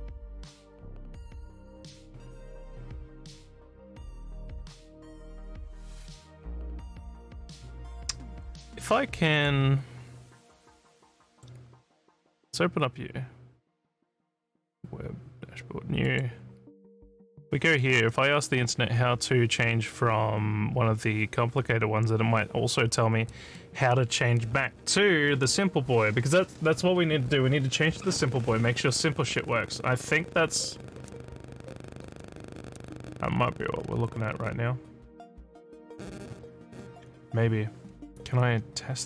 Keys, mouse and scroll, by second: 9.3 click, 11.3 right click, 16.1 click.